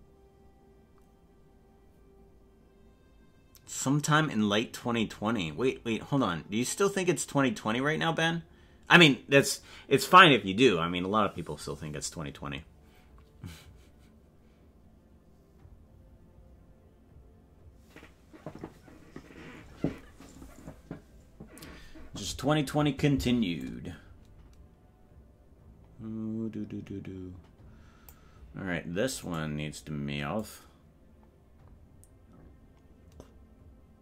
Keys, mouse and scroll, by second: 23.7-28.2 drag, 29.6 right click, 30.5-34.0 drag.